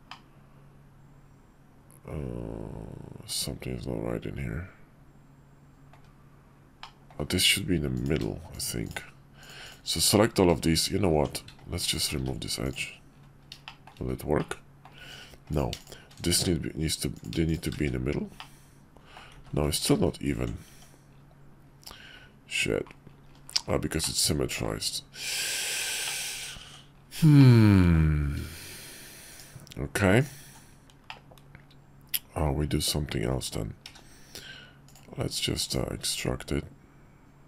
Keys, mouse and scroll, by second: 0.1-5.9 middle drag, 6.8 middle click, 7.9 click, 8.5 shift+click, 8.9 shift+click, 9.6 shift+click, 11.1 Tab, 11.8 alt+click, 12.2 x, 13.6 shift+click, 14.4 middle click, 15.0 Tab, 15.5 click, 15.8 shift+click, 16.4 shift+1, 17.1 click, 17.5 shift+click, 17.9 shift+1, 18.4 middle click, 19.4-20.0 ctrl+z, 20.7 Tab, 24.0-24.6 middle drag, 26.0 shift+middle click, 26.6 Tab, 26.9 middle click, 27.4 click, 29.3 shift+click, 31.1-33.5 drag, 33.8 q.